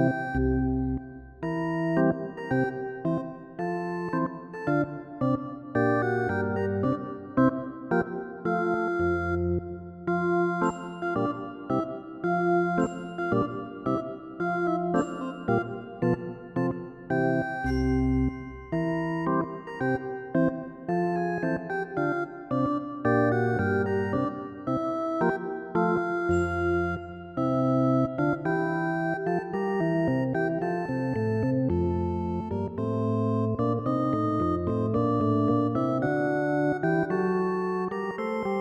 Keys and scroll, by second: 10.8 ctrl+-, 18.1 ctrl+i, 23.3 ctrl+z.